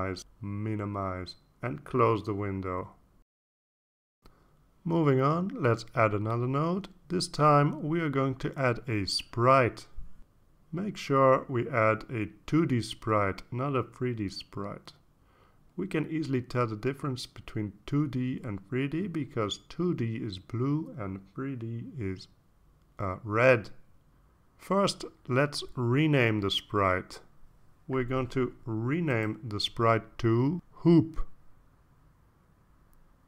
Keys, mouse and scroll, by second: 1.0 click, 2.7 click, 3.9-5.9 drag, 6.5 scroll down 2, 9.3 click, 13.2-15.3 typing, 16.6 click, 18.1 click, 31.0 click.